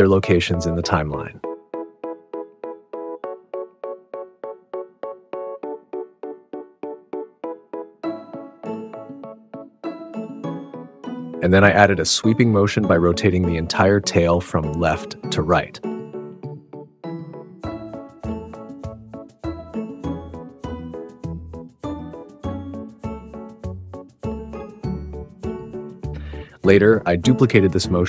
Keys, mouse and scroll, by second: 0.1 click, 0.2 super+z, 0.3 super+z, 0.7 a, 0.9 r, 1.2 g, 2.4 click, 2.9 r, 3.2 click, 3.3 g, 4.4 r, 4.6 click, 4.7 g, 5.1 click, 5.1 super+z, 5.2 s, 7.3 a, 8.0 click, 8.8 click, 10.5 click, 11.0 click, 11.2 super+z, 11.2 a, 11.2 r, 11.7 g, 12.3 drag, 12.6 click, 13.0 g, 13.8 r, 14.7 g, 16.4 drag, 16.6 drag, 17.0-20.0 typing, 18.0 alt+o, 19.2 click, 19.5 click, 20.4 Tab, 20.5 Tab, 20.7 Tab, 20.9 click, 21.0 click, 21.2 Tab, 21.4 a, 21.5 r, 21.9 g, 22.9 click, 23.5 r, 24.7-27.2 typing, 25.4 click, 26.3 click, 26.6 click, 26.9 Tab, 27.0 click, 27.8 click.